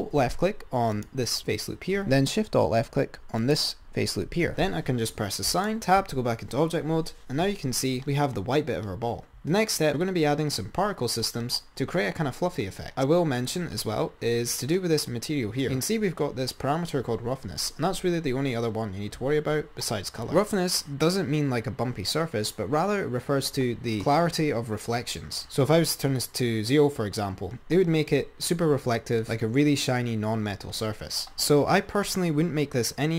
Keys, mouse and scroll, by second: 1.2 alt+click, 3.7 alt+shift+click, 5.7 click, 6.2 Tab, 7.3-8.1 scroll down 7, 8.1 click, 12.0-12.9 scroll down 6, 12.9-14.3 drag, 14.3-15.9 scroll up 6, 15.9-19.0 scroll up 6, 25.5 ctrl+z.